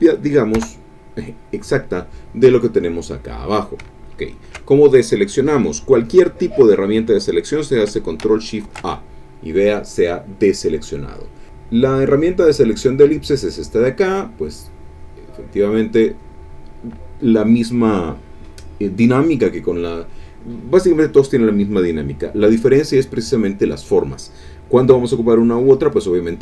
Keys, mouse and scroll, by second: 0.6 Return, 8.6 ctrl+shift+a, 11.1 click, 12.4 click, 13.1 click, 14.4-16.3 drag.